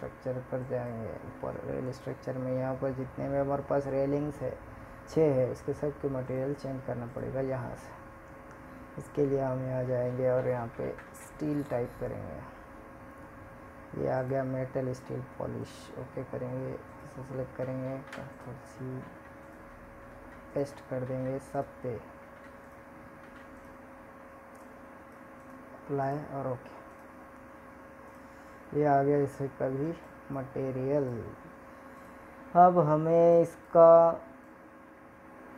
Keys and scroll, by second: 14.3 ctrl+c, 15.4 ctrl+v.